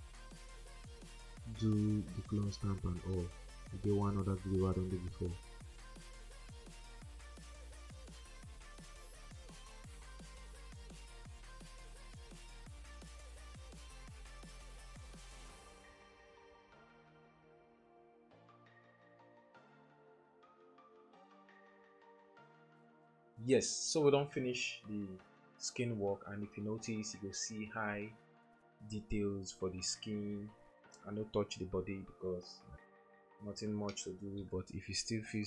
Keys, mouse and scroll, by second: 0.2 alt+click, 0.9 double click, 1.3 alt+click, 1.5 alt+click, 1.6 alt+double click, 1.7 alt+click, 1.9 alt+click, 2.1 alt+click, 2.5 alt+click, 2.6 alt+click, 2.8 alt+click, 3.1 alt+click, 4.1 space, 4.7 alt+click, 4.9 alt+click, 5.2 alt+click, 5.5 alt+click, 5.6 alt+click, 6.0 alt+click, 6.5 alt+click, 7.1 alt+click, 7.1 alt+double click, 7.2 alt+click, 7.4 alt+click, 8.0 alt+click, 8.3 alt+click, 8.9 alt+click, 9.2 alt+click, 9.5 alt+click, 9.7 alt+click, 10.0 alt+click, 10.3 alt+click, 10.4 double click, 10.6 alt+click, 10.8 alt+click, 11.3 alt+click, 11.5 alt+click, 11.9 alt+click, 12.1 alt+click, 12.3 alt+click, 12.7 alt+click, 13.2 alt+click, 13.5 alt+click, 14.1 alt+click, 15.3 ctrl+0, 25.4 typing, 28.1 double click, 30.4-30.7 typing.